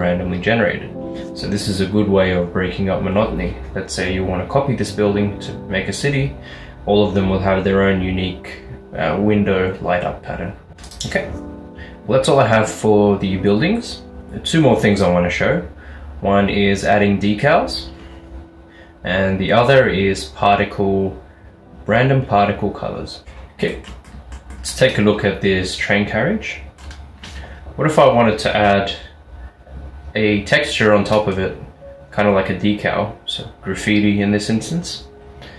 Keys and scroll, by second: 23.2 x, 23.2 s.